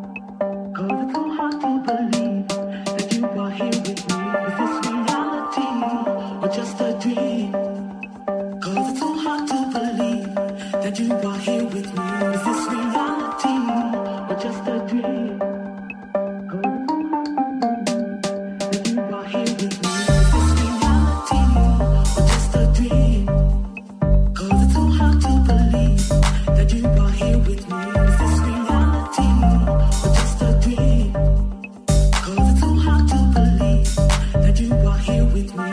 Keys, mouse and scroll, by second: 0.7-3.6 shift+middle drag, 2.0 w, 3.6 KP_1, 4.1-7.9 shift+middle drag, 7.9 e, 8.6 g, 9.1 r, 11.4 e, 12.5 1, 16.9 g, 18.7 r, 20.1-23.2 middle drag, 20.1 g, 22.6 alt+z, 23.2-25.3 alt+drag, 23.3 alt+z, 23.6 r, 25.3-31.5 middle drag, 25.3 g, 31.5 middle click, 31.8-35.7 shift+middle drag, 35.1 alt+click, 35.6 alt+z.